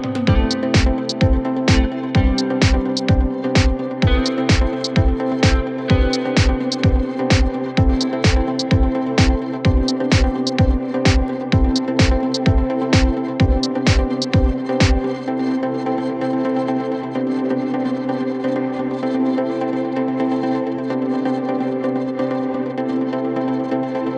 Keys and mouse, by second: 0.5-1.8 middle drag, 1.5 shift+d, 1.8-5.0 drag, 4.5 s, 5.0-8.3 middle drag, 5.5 s, 8.3-12.5 drag, 11.3 s, 12.5 middle click, 13.2-18.0 drag, 16.5 KP_1, 16.6 KP_3, 17.5 r, 18.0 middle click, 18.8-24.1 drag.